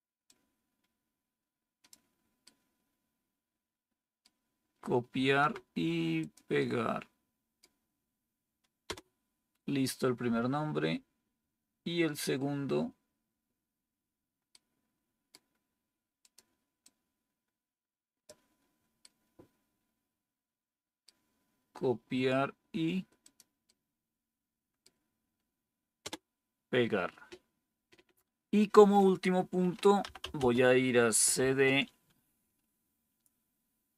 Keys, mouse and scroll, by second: 0.2-1.8 scroll down 1, 1.8-2.9 scroll down 1, 2.9-4.1 scroll down 1, 4.1-4.9 scroll down 1, 4.9-6.1 scroll down 1, 6.1-7.5 scroll down 1, 7.5-8.2 scroll down 1, 8.2-8.8 scroll down 1, 8.8 Return, 14.4-25.9 right drag, 25.9 Return, 29.7-31.3 typing, 33.8-33.9 typing.